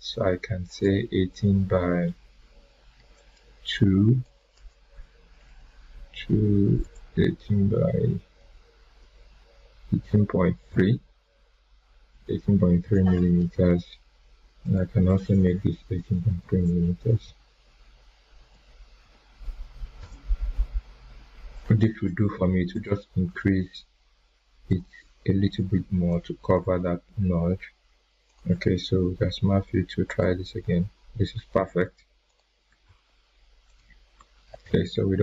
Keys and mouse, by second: 0.6 click, 3.1-4.4 drag, 6.8 BackSpace, 8.7 BackSpace, 12.1 3, 14.6 click, 15.7 Delete, 16.9 BackSpace, 18.4 Delete, 19.0 3, 19.9 Return, 22.7 click, 23.1 click, 24.6 right click, 25.8 right click, 26.0-26.7 drag, 31.5 ctrl+z, 32.2 click, 32.8 ctrl+z, 33.6 click, 34.3 ctrl+z.